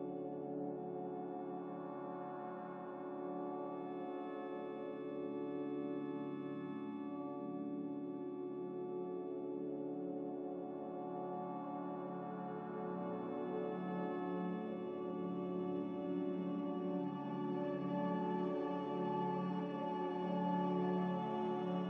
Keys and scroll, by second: 0.0 g, 3.6 b, 4.4 Delete, 4.8 n, 5.9 a, 13.8 z, 17.9 ctrl+c, 18.0 ctrl+v.